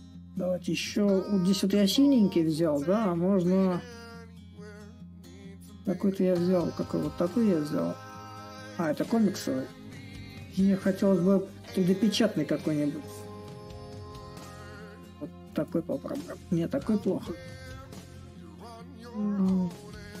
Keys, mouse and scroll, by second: 0.0-5.0 drag, 7.7-12.7 drag, 15.2-20.2 drag.